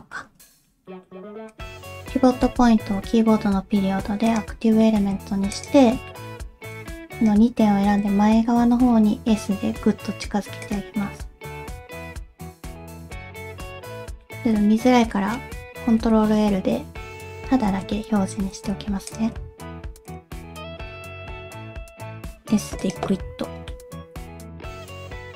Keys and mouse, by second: 0.5 shift+middle click, 0.9 middle click, 1.5 click, 4.8 middle click, 5.5 shift+click, 6.1 middle click, 6.7 click, 7.1 shift+click, 8.6 s, 11.0 middle click, 12.7 click, 13.6 alt+z, 13.9 middle click, 16.0 ctrl+l, 17.6 shift+h, 18.5 alt+z, 19.1 click, 20.1 shift+click, 20.4 middle click, 20.8 alt+z, 21.2 s, 23.1 middle click, 24.0 s, 24.5 shift+middle click, 24.7 middle click, 24.9 alt+z, 25.0 middle click, 25.3 click.